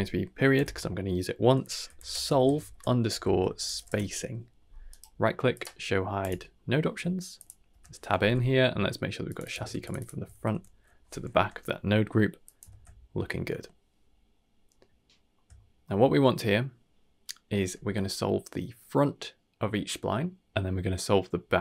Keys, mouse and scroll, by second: 4.8-7.3 right drag, 7.3 click, 7.7 Tab, 8.2 n, 9.2 click, 9.4 click, 9.9 click, 11.3 n, 12.4 drag, 12.7 ctrl+x, 14.9-15.3 shift+middle drag, 15.5 middle click, 16.1-17.1 scroll up 1.